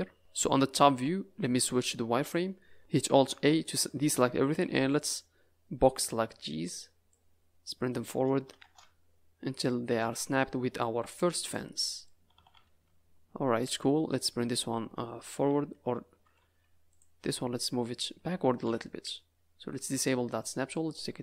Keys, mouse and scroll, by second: 0.9 KP_7, 1.4 z, 2.8 click, 3.2 alt+a, 4.7 b, 7.1 click, 10.0 Tab, 10.3 middle click, 10.9 z, 11.8 middle click, 12.3 a, 12.5 a, 12.6-13.5 scroll up 9, 13.6 click, 15.4 Tab, 16.3 Tab, 16.8 click, 17.2 Tab, 17.8-18.2 scroll down 6, 19.9 click, 20.7 click.